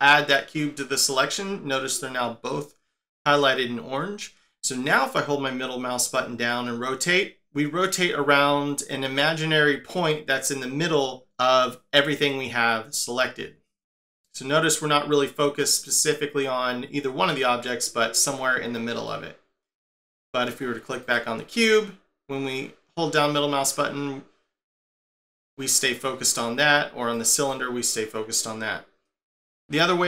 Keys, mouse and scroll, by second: 4.9 middle click, 12.3 middle click, 19.1 middle click, 21.0 click, 21.7 middle click, 27.1 click, 27.5 middle click.